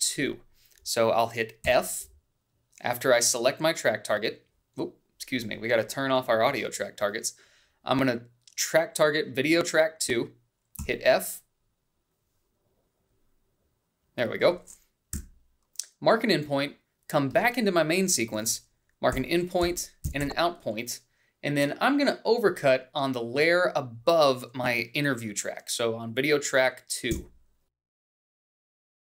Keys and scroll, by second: 3.0 f, 12.2 f, 13.4 f, 16.6 i, 20.6 i, 21.1 Down, 21.5 Left, 21.6 o, 28.7 b.